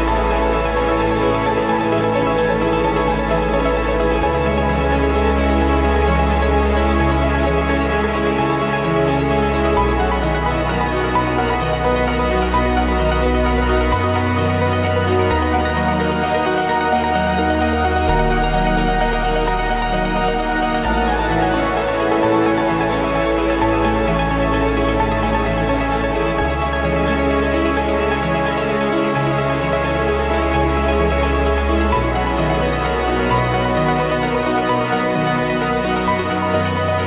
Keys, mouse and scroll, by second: 0.8-2.6 drag, 2.8-4.2 drag, 4.3 0, 5.9 click, 6.8 click, 7.6 click, 8.5 click, 9.4 click, 10.8 click, 12.6 Escape, 12.9 click, 14.0 click, 15.6 click, 16.6 click, 17.4-19.9 drag, 20.5 click, 21.5 right click, 22.9 click, 24.3 click, 26.2 click, 27.2 click, 28.0 click, 28.5 click, 29.6 click, 30.2 right click, 31.7 click, 32.7 click, 34.4 click, 36.4 click.